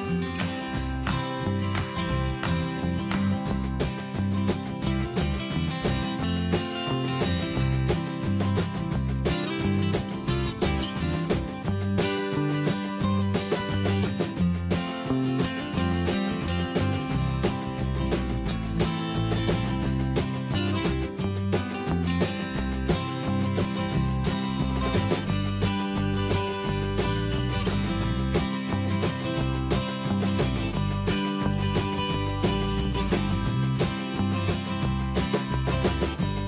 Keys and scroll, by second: 2.4 Escape, 22.7 Escape, 27.8 alt+Down, 29.0 ctrl+shift+., 29.9 Escape.